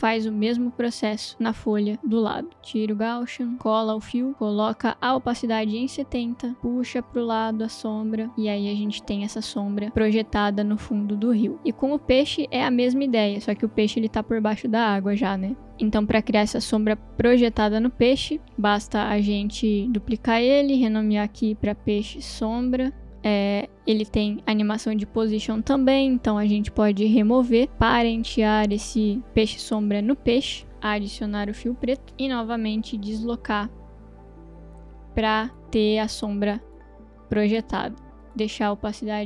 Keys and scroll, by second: 2.0 ctrl+c, 3.7 ctrl+v, 4.3 t, 5.5-6.3 typing, 6.9 Return, 18.6 ctrl+d, 20.6 Return, 21.2 Right, 21.9-24.4 typing, 30.7 ctrl+space, 30.7-31.6 typing, 31.7 Return, 37.7-39.2 typing.